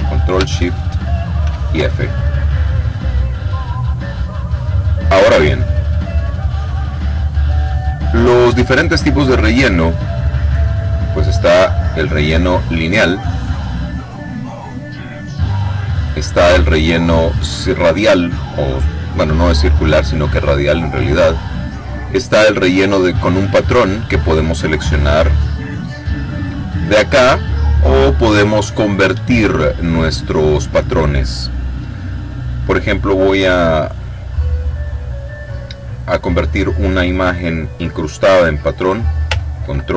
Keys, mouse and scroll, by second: 1.4 ctrl+shift+f, 3.5-5.5 drag, 9.4 click, 11.2 click, 15.5 click, 22.8 click, 24.0 click, 26.5 click, 34.7 click.